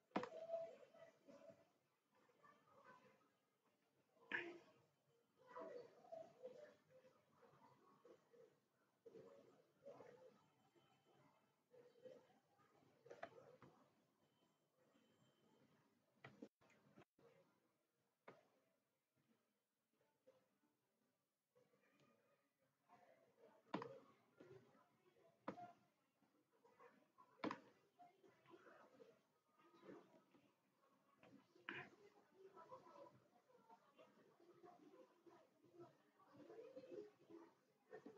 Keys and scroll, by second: 16.8 Delete.